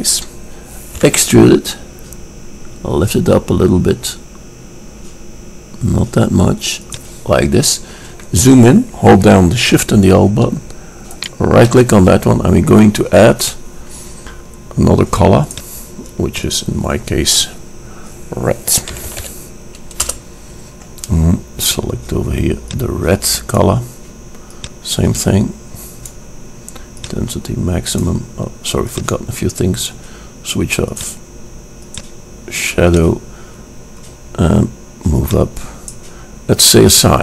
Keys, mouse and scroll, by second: 0.4 click, 1.2 e, 1.3 middle click, 7.8-10.1 middle drag, 11.4-13.3 drag, 13.5-15.7 drag, 15.8 click, 21.8-23.5 drag, 24.8-26.5 drag, 26.5 middle drag, 27.2-28.9 drag, 29.1-30.9 drag, 31.1-34.8 drag, 35.3-37.2 drag.